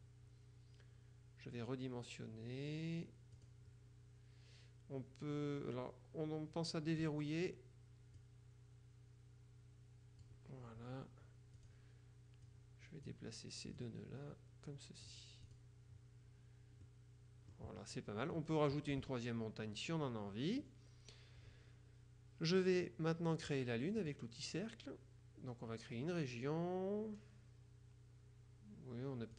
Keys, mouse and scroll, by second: 3.4 click, 8.3-10.8 drag, 11.7 click, 12.6-13.6 drag, 13.8-16.2 drag, 16.9-18.1 drag, 24.0 click, 27.3-27.8 scroll down 1.